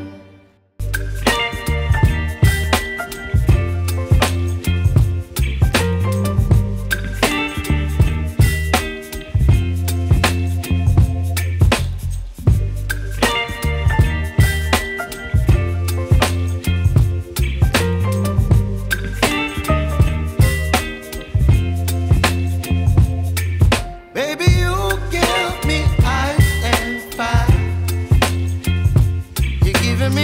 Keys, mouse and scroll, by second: 1.6 click, 2.0 scroll down 1, 2.2 scroll up 1, 2.5 right click, 3.8-4.4 scroll up 1, 14.9 click, 15.1 scroll down 1, 15.3-16.0 scroll up 1, 16.4 right click, 19.5 click, 21.2 scroll down 1, 21.4 scroll up 1, 21.6 right click, 22.4 scroll down 1, 22.5 right click, 22.9 Tab, 23.5 scroll up 1, 23.8 right click, 24.5 scroll down 1, 24.7 right click, 25.2-25.7 scroll up 1, 25.7 Tab, 26.0 scroll up 1, 26.4 ctrl+shift+click, 28.0 Delete, 28.2-29.0 scroll down 1, 29.4 right click, 30.0 scroll down 1, 30.1 scroll up 1.